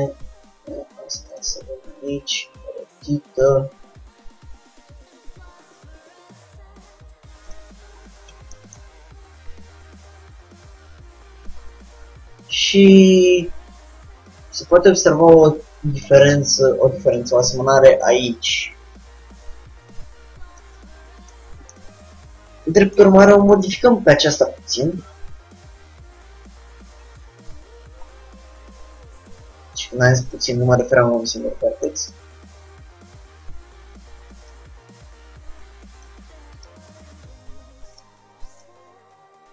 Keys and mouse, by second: 1.9 r, 3.6-5.5 drag, 4.0 g, 8.0-13.8 middle drag, 16.1-20.1 drag, 20.1-21.5 middle drag, 21.6 middle click, 23.6 Tab, 25.3-27.1 drag, 26.0 g, 34.6-36.4 drag, 35.2 g, 36.7 click, 37.0 g, 38.7-39.5 drag, 38.9 g.